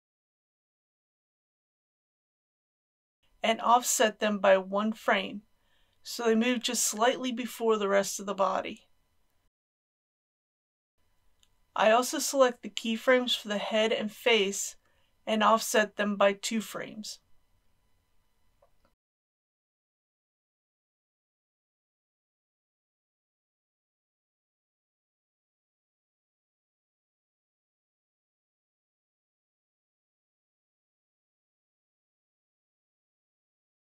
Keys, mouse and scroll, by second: 3.1 ctrl+z, 3.9-10.9 drag, 10.9 n, 12.2-28.2 drag, 28.2 shift+click, 29.7-31.3 drag, 31.9-33.9 drag.